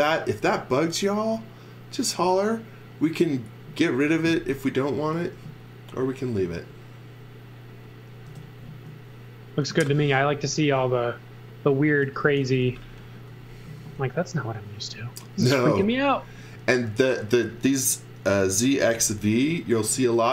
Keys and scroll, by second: 5.1 x, 6.5 z, 8.2 space, 9.7 z, 10.4 x, 11.7-13.6 typing, 15.5 x, 15.8 v, 18.1-19.4 typing.